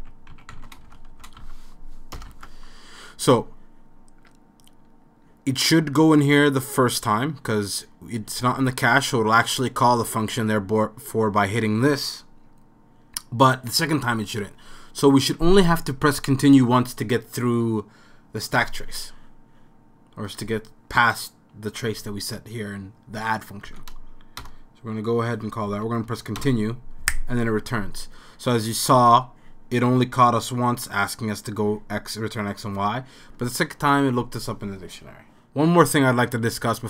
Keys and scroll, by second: 0.0-2.8 typing, 23.7 Up, 24.4 Return, 25.7 c, 26.4 Return, 28.4 typing.